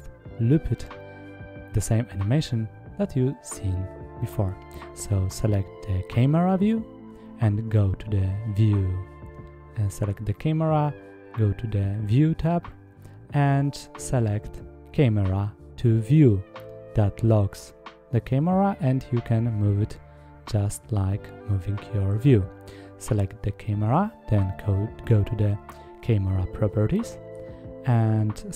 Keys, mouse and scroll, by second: 0.8 click, 3.0 click, 11.2 click, 14.0 click, 15.4 middle click, 20.2 click, 24.3 click, 26.4 click.